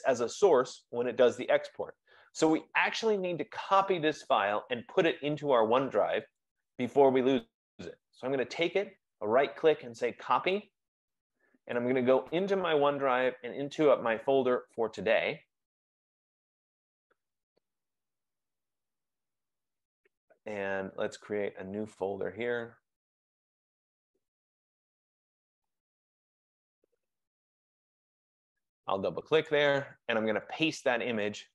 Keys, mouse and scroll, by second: 6.5 right click, 10.8 click, 12.0 click, 15.2 click, 16.4 click, 17.0 click, 17.2 click, 19.0 click, 19.2 click, 22.7 right click, 25.4 click, 26.4-27.8 typing, 27.8 Return, 29.6 click, 29.8 click, 30.6 right click.